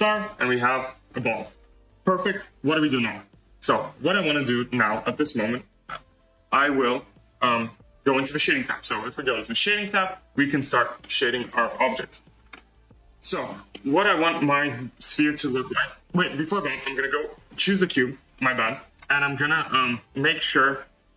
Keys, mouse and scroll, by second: 0.0 scroll, 0.6-1.1 middle drag, 1.1 scroll, 3.6 click, 5.8 click, 6.1 click, 7.6 click, 8.3 click, 10.2 drag, 10.8 scroll up 2, 11.0-11.5 middle drag, 11.5-11.9 scroll up 2, 11.9-14.1 shift+middle drag, 14.1 scroll up 1, 14.4-16.2 middle drag, 16.2 click.